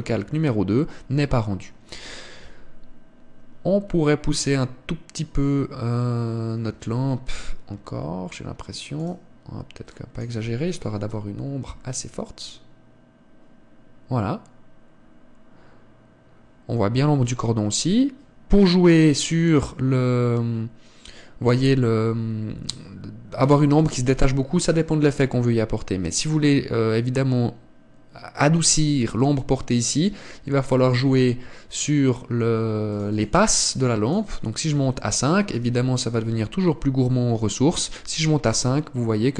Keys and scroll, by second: 7.7 Escape, 32.3 Escape.